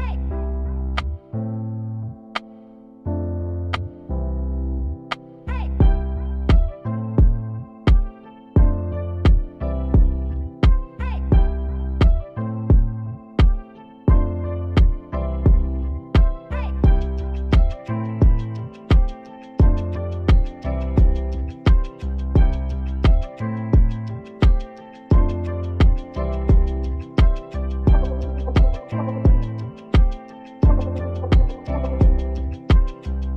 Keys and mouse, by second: 1.5-2.7 drag, 2.7 middle click, 12.0 middle click, 21.0 KP_7, 22.7 KP_7, 22.7 KP_4, 23.3 KP_7, 24.5 click, 25.0 shift+a, 26.0 s, 27.2 p, 28.3 Tab, 28.6 click.